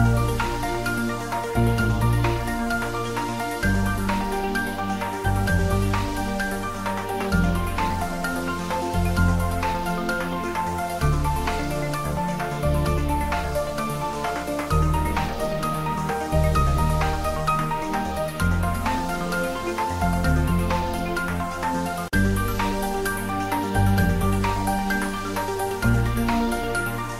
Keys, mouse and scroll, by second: 0.2 shift+click, 0.2 shift+click, 0.6 middle click, 1.3 shift+click, 2.8 ctrl+middle click, 3.7 r, 4.6 click, 4.9 s, 5.5 click, 6.6 g, 8.0 click, 8.3 r, 9.3 click, 10.9 g, 11.7 Up, 13.2 click, 14.2-15.1 typing, 15.4 click, 16.2 ctrl+s, 17.3 click, 17.6 ctrl+s, 17.8 ctrl+middle click, 18.7 ctrl+z, 18.9-19.7 typing, 20.9 click, 20.9-21.8 typing, 22.2 click, 23.0 ctrl+s, 23.2 click, 23.6 ctrl+s, 26.2 ctrl+s, 26.7-27.1 shift+middle drag.